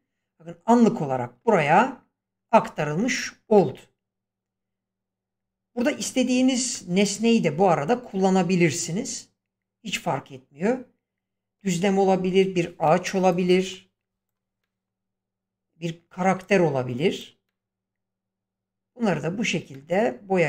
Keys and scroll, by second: 2.7 Escape.